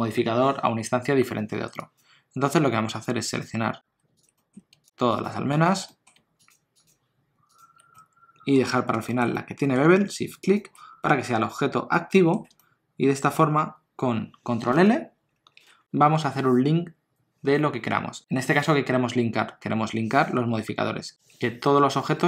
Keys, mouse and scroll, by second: 1.8 click, 4.2 shift+click, 4.3 middle click, 4.5 scroll down 1, 4.8 shift+click, 5.9 middle click, 6.4 shift+click, 7.9 middle click, 8.6 scroll up 2, 9.0 shift+middle click, 9.3 middle click, 9.8 scroll down 1, 10.4 shift+click, 12.1 middle click, 12.6 ctrl+middle click, 15.4 ctrl+l.